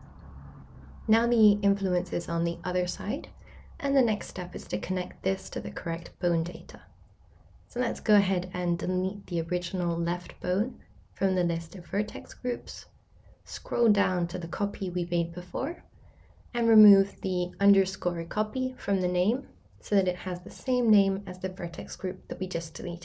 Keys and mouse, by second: 13.5 click, 14.8 click, 19.5 click, 19.9 click, 20.4 click, 20.6-23.0 drag, 22.5 BackSpace, 22.7 BackSpace.